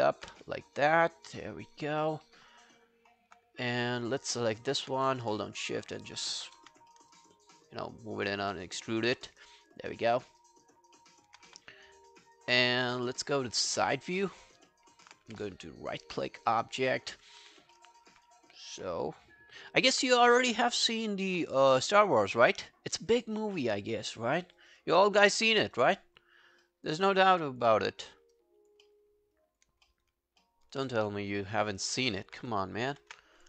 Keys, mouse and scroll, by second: 0.3 w, 0.7 right click, 1.9 right click, 2.3 alt+right click, 2.8 alt+click, 4.0 double click, 4.4 alt+scroll down 1, 4.6 alt+click, 6.6 q, 6.9 alt+middle click, 7.1 alt+right click, 7.4 alt+click, 8.3 alt+middle click, 8.6 alt+right click, 8.8 alt+click, 9.2 alt+middle click, 9.3 alt+right click, 9.6 alt+click, 10.0 alt+middle click, 10.2 alt+right click, 10.4 alt+click, 10.7 alt+scroll down 5, 11.0 alt+middle click, 11.6 space, 12.9 space, 13.3-13.7 scroll up 5, 13.9 alt+middle click, 14.4-14.7 alt+scroll down 6, 14.7 alt+middle click, 15.0 alt+scroll up 4, 15.3 w, 15.5 right click, 16.5 scroll up 1, 16.8 alt+middle click, 17.4 w, 17.5 scroll down 3, 17.8 alt+middle click, 18.1 alt+scroll up 3, 19.4 alt+scroll down 1, 19.6 alt+middle click, 20.2 space, 21.3 space, 21.8 alt+middle click, 22.1 alt+right click, 22.3 alt+click, 22.7 alt+middle click, 22.9 alt+right click, 23.1 alt+click, 23.6 alt+middle click, 23.8 alt+right click, 24.0 alt+click, 24.4 alt+middle click, 24.6 alt+right click, 24.8 alt+click, 25.5 alt+middle click, 25.8 alt+right click, 26.0 alt+click, 26.4 alt+scroll down 1, 26.6 alt+middle click, 26.9 alt+right click, 27.1 alt+click, 27.8 alt+scroll down 1, 28.1 alt+middle click, 28.4 alt+click, 28.9 alt+middle click, 29.2 alt+scroll down 1, 29.4 alt+click, 29.9 alt+middle click, 30.4 alt+middle click, 31.7 shift+click, 32.1 alt+middle click.